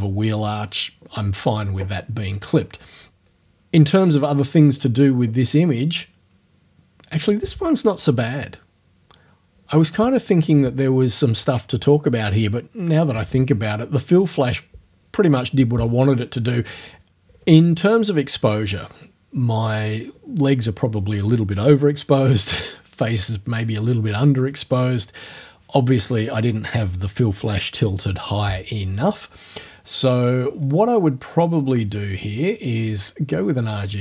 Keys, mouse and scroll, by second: 30.6 click, 32.7 click.